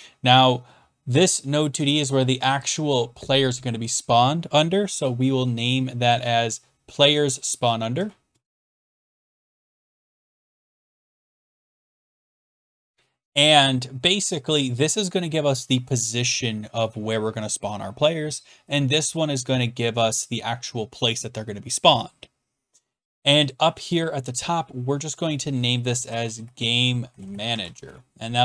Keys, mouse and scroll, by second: 5.0 right click, 6.1 click, 7.9-12.4 typing, 12.5 Return, 14.6 click, 18.7 click, 23.5 click, 25.2 click, 25.8-28.2 typing.